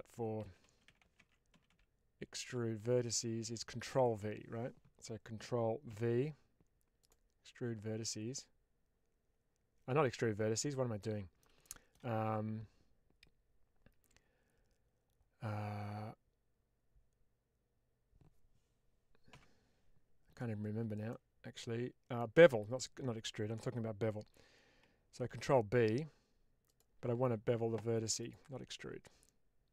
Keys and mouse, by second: 5.9 ctrl+v, 10.1 Escape, 11.0 middle click, 11.6 shift+middle click, 20.5 Escape, 21.1 middle click, 25.2 ctrl+b, 26.6 click, 28.1 click.